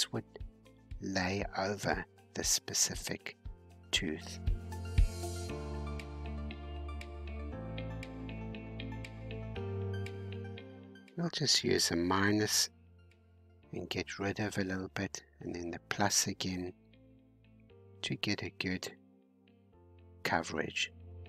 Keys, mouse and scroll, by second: 0.9-5.0 drag, 5.0-5.4 scroll down 2, 5.4-7.8 middle drag, 7.8-8.1 scroll up 5, 8.4-9.6 shift+middle drag, 9.6-16.8 drag, 16.8 scroll up 2, 17.5-21.2 drag.